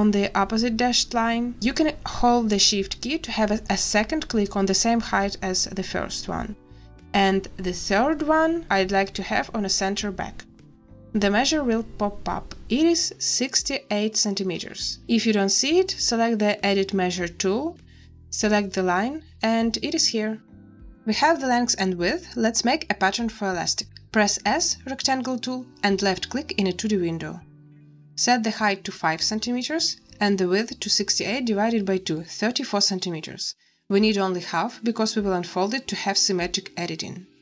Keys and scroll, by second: 24.4 s, 29.0 5, 32.2 3, 32.6 4.